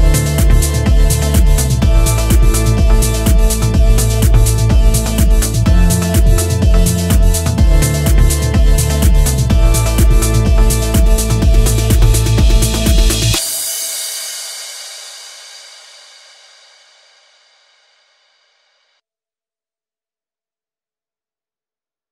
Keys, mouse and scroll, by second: 2.8 middle click, 4.0 click, 6.3 click, 7.3 scroll down 2, 7.5 middle click, 8.0-8.5 scroll up 4, 8.5 middle click, 10.0 click, 14.2 click, 15.6-16.4 scroll down 4, 16.4-16.9 scroll up 3, 16.9 middle click, 17.6 scroll down 1, 17.9 shift+middle click, 18.4-19.6 scroll up 1, 19.6 click, 19.6-20.7 scroll up 1.